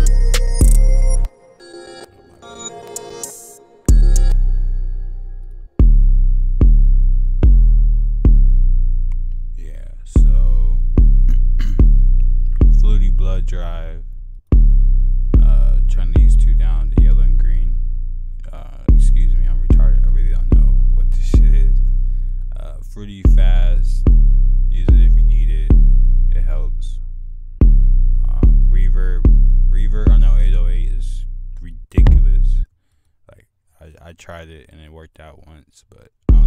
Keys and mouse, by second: 1.9 click, 3.6 click, 4.1 click, 10.5 F1, 10.5-10.9 drag, 11.0 F1, 11.0 click, 11.1 right click, 14.8 click, 19.2 click, 21.3-24.3 right drag, 28.0 right click, 33.6 right click, 35.3 typing.